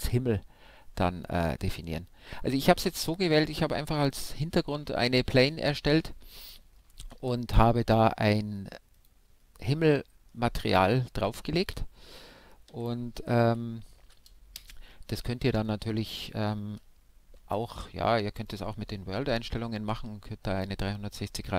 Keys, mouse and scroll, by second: 3.8 shift+a, 6.1-9.3 middle drag, 6.1-6.5 scroll up 1, 10.0 r, 12.2-13.9 middle drag, 14.0 s, 15.2-16.9 right drag, 17.0-18.8 drag, 19.9-21.5 middle drag.